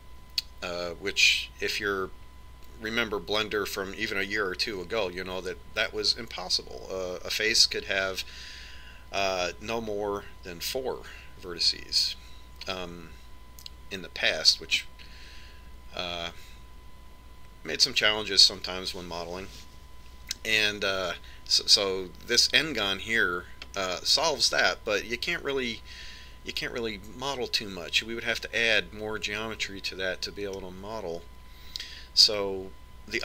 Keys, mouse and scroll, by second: 25.0-27.0 middle drag.